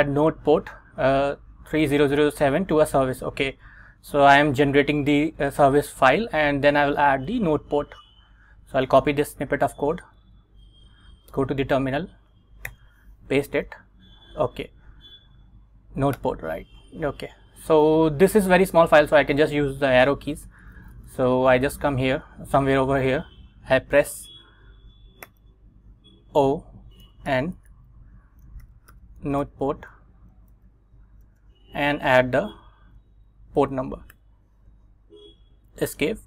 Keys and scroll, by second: 10.3 super+Tab, 11.4 Return, 12.8 super+v, 13.6 Up, 16.3 Return, 20.3 Down, 21.3 Down, 25.4 o, 26.9-34.2 typing, 35.6 Escape.